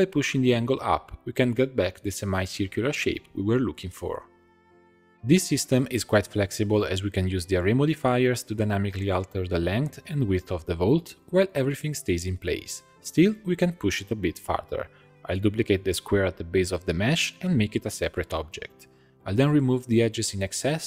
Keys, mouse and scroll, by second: 0.2-3.3 drag, 5.1-9.5 drag, 11.0-14.8 drag, 14.8 middle click, 15.2 3, 15.5 click, 15.7 shift+click, 16.1 shift+click, 16.5 shift+click, 16.9 shift+click, 17.2 scroll down 1, 17.4 middle click, 17.8 shift+d, 18.5 p, 19.0 shift+click, 19.4 x, 20.1 scroll down 2, 20.2 middle click.